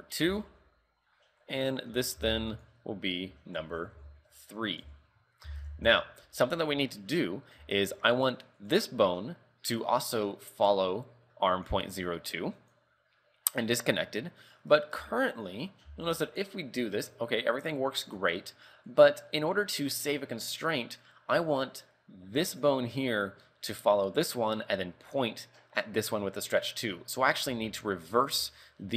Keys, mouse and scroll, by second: 1.5 right click, 2.3 ctrl+v, 2.6 click, 7.0 shift+middle click, 7.4 scroll up 2, 7.8 shift+middle click, 8.7 right click, 9.9 scroll down 5, 11.6 click, 13.6-14.1 scroll up 3, 14.5 right click, 15.1 Tab, 15.4 right click, 15.7 scroll down 4, 16.0 r, 18.5-19.0 scroll up 4, 19.0 right click, 19.5-19.8 scroll down 4, 19.8 scroll up 2, 21.5 right click, 21.9-22.6 scroll down 4, 22.6 right click, 26.3-27.3 scroll up 7, 27.3 right click, 27.6 Tab, 28.2 right click, 28.5 shift+middle click.